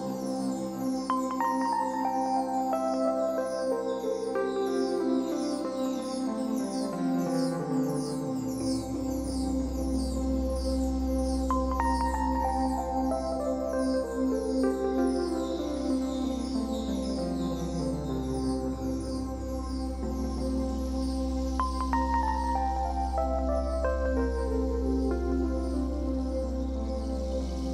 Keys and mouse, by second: 0.3-0.7 typing, 2.1-4.0 drag, 4.0-4.8 typing, 8.7 click, 9.7-12.2 drag, 13.6 click, 14.3 KP_5, 14.6 KP_0, 14.8 Return, 18.9-19.9 drag, 20.6 KP_1, 21.0 KP_0, 21.1 KP_0, 21.3 Return, 23.8 click, 25.3 click.